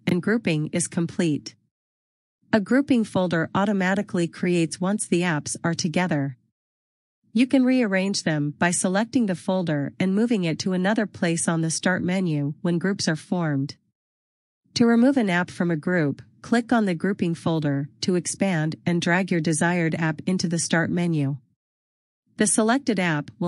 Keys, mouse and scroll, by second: 6.6 click, 9.4 click, 18.1 click, 20.6 click.